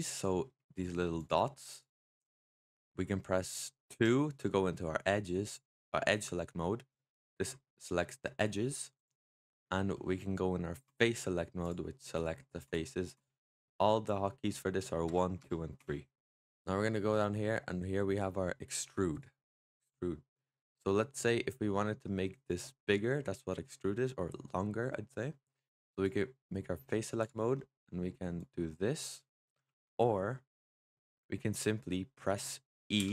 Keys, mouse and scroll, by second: 0.2 middle click, 1.0 click, 1.6 click, 1.9-3.8 middle drag, 3.8 2, 5.3 click, 7.1 click, 7.4-8.3 middle drag, 8.3 click, 8.8 click, 9.3-10.7 middle drag, 10.7 click, 12.0 click, 12.5 click, 13.0 click, 14.4 middle click, 14.9 1, 15.3 2, 15.7 3, 16.5 1, 19.0 click, 23.0-25.8 middle drag, 25.8-27.2 drag, 27.4 middle click, 28.2 click, 29.5 ctrl+z, 31.0 click, 31.5 middle click, 32.0-32.9 scroll down 2, 32.9 e.